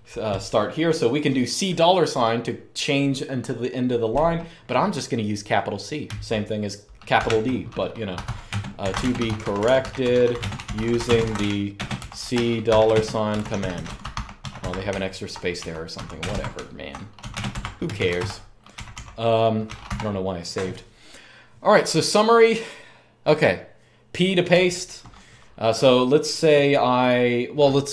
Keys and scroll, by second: 6.9-19.6 typing, 24.3-24.6 typing.